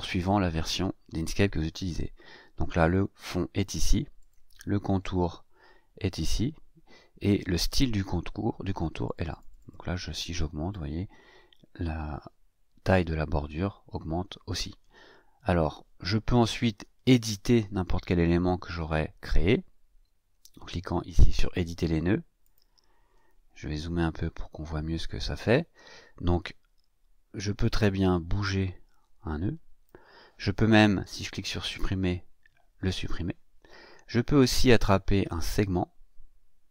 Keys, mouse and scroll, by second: 2.8 click, 4.1 click, 7.2 click, 9.0 click, 22.4 click, 24.2-24.6 ctrl+scroll up 2, 27.7-30.0 drag, 31.8 Delete, 34.8-36.7 drag.